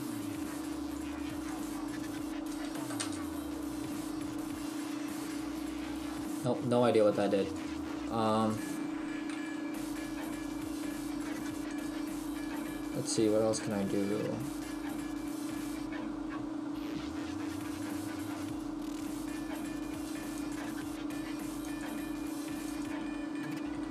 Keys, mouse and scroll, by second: 1.8 click, 4.4-5.1 scroll down 1, 7.0-7.5 scroll down 3, 7.5 click, 8.1 right click, 9.4 Delete, 9.4 click, 11.7 click, 21.8 click, 23.6 KP_1.